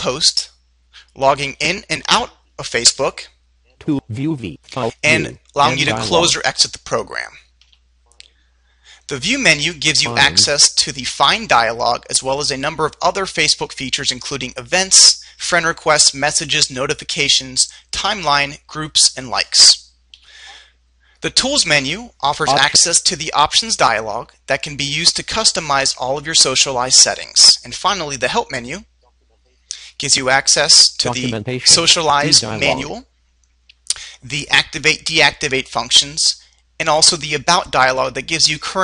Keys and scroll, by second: 7.9 Right, 20.4 Right, 28.8 Right.